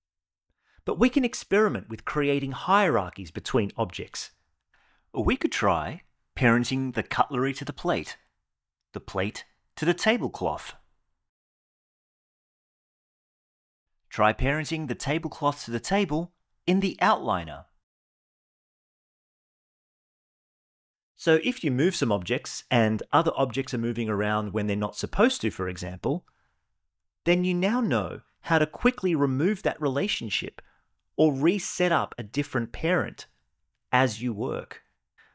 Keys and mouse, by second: 4.8 click, 5.5 shift+click, 6.2 shift+click, 6.9 shift+click, 7.9 ctrl+p, 9.2 click, 10.5 shift+click, 11.9 ctrl+p, 14.7 click, 15.0 click, 16.7 shift+click, 18.9 click, 19.2 g, 20.9 click, 21.3 g, 24.8 shift+s, 28.8 shift+click, 31.1 click, 31.6 g, 32.7 click, 32.9 g.